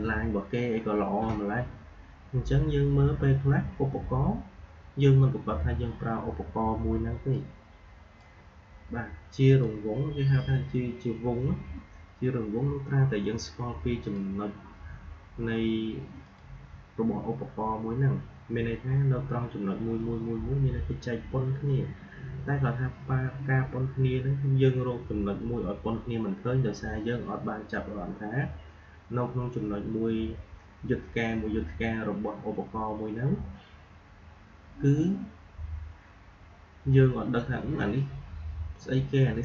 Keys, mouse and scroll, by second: 7.2-9.3 drag, 13.9 click.